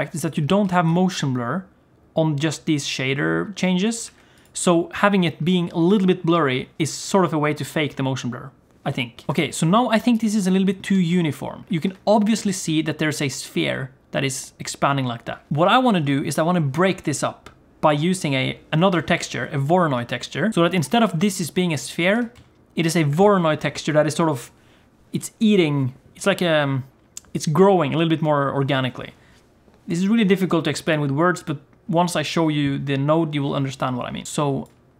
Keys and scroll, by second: 0.6 g, 9.3 g, 10.9 g, 12.3 g, 22.2 g.